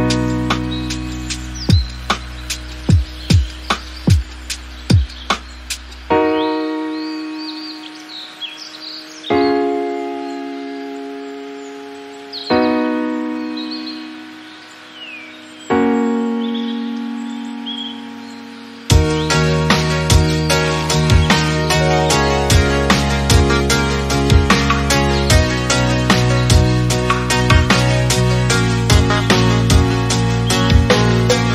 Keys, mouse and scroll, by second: 0.2 scroll up 1, 0.4 shift+middle click, 0.9 r, 2.6 g, 4.6 Tab, 4.8-5.9 scroll down 3, 5.9-7.1 scroll up 2, 7.1 Tab, 7.6 click, 9.7 click, 10.5 Tab, 11.0 drag, 11.3 click, 12.7-13.1 scroll down 2, 13.1 Tab, 13.4 Tab, 14.0 click, 14.7 alt+z, 14.8 click, 15.1-15.7 scroll down 8, 15.7-16.1 shift+middle drag, 16.1 scroll down 1, 16.3 middle drag, 16.6-16.9 scroll up 1, 16.9 middle drag, 17.2 scroll up 1, 17.3 scroll down 2, 17.5 middle click, 18.3-19.1 drag, 19.1 scroll down 2, 19.3-19.9 shift+middle drag, 19.9-20.7 scroll up 4, 20.2 shift+middle drag, 20.7 scroll down 1, 20.9-22.2 middle drag, 22.2 scroll down 2, 22.4-22.9 shift+middle drag, 22.9-23.7 scroll up 4, 23.2 middle click, 23.7 click, 24.3 KP_1, 24.7 KP_Decimal, 25.3-26.9 shift+middle drag, 27.5 s, 28.5 shift+middle click, 28.7-29.1 scroll up 1, 29.1 Tab, 29.9 click, 30.4 alt+z, 30.7 click, 31.3 click.